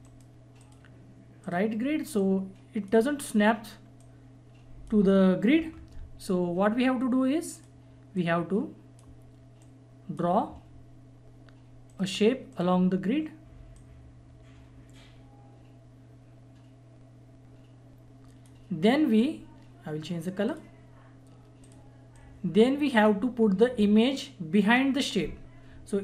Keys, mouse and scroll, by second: 0.0 right click, 0.6-7.5 drag, 7.5-12.0 drag, 11.9 right click, 12.0 right click, 12.5-25.8 drag.